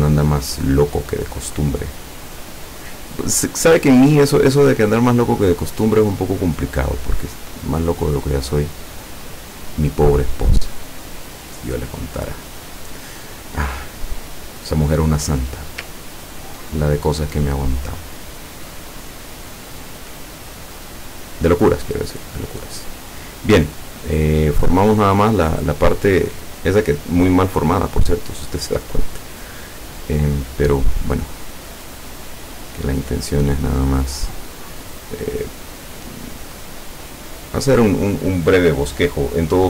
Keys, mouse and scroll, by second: 0.1-3.1 drag, 3.7-6.0 drag, 7.5-9.4 drag, 15.2 click, 16.0 ctrl+scroll up 2, 19.9 click, 22.0 click, 24.7-25.4 drag, 28.8 click, 30.6 click, 32.3 click, 33.7 click, 36.0 click, 37.5 click.